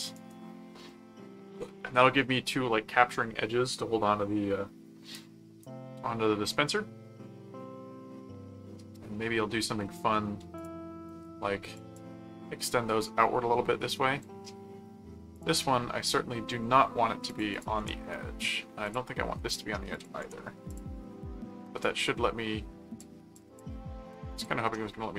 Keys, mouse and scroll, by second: 0.1 right click, 10.5 click, 11.7 click, 15.3 click, 17.3 click, 18.9 click, 19.9 click, 20.7 click, 21.8 click, 23.4 click, 24.4 click.